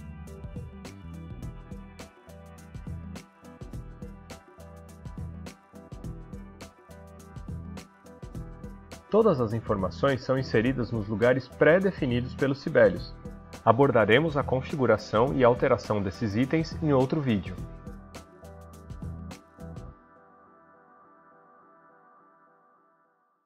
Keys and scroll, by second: 1.6-7.5 typing.